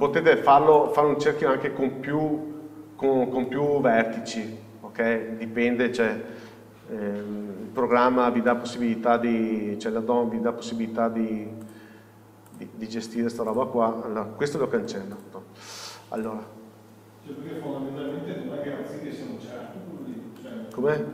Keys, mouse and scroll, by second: 0.5-1.1 scroll up 1, 5.9 scroll down 1, 6.8 scroll up 1, 7.5 scroll down 1, 8.2 scroll up 1, 8.6 shift+middle click, 9.5 scroll down 1, 10.1 scroll up 1, 10.9-11.9 scroll down 1, 11.9 click, 13.2 Tab, 13.7 click, 15.4 x, 16.4 click, 17.4 scroll down 1, 18.0 Tab, 18.4-18.9 scroll down 1, 18.9 scroll up 1.